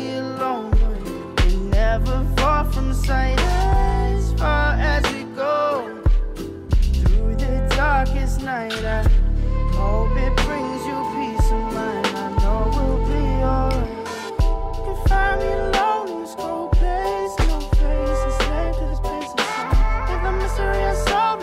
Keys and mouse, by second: 0.2-0.5 drag, 0.8 click, 1.3 middle drag, 1.9 click, 2.3-2.6 middle drag, 2.7 ctrl+z, 3.0 g, 4.4 g, 5.0 middle drag, 5.5 middle drag, 5.9 middle drag, 6.8-7.6 middle drag, 8.0 middle click, 8.7 s, 9.8 middle click, 10.4 s, 11.7 middle click, 12.2 g, 13.9 r, 14.9 middle drag, 15.4 middle drag, 15.8 click, 16.3 middle click, 17.1 click, 17.5-18.1 drag, 18.4 click, 19.0 middle click, 19.2 middle drag, 19.6 shift+middle click, 20.0 shift+middle click, 20.1-20.6 middle drag, 20.8 shift+middle drag, 21.1 middle drag.